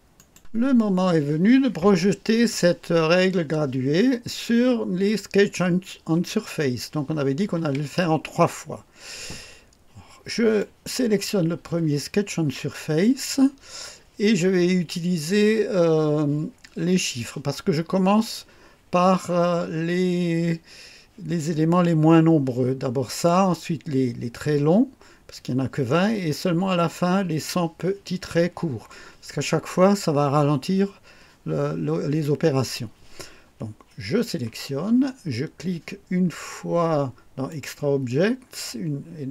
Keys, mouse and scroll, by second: 0.2 right click, 10.6 click, 37.5 click.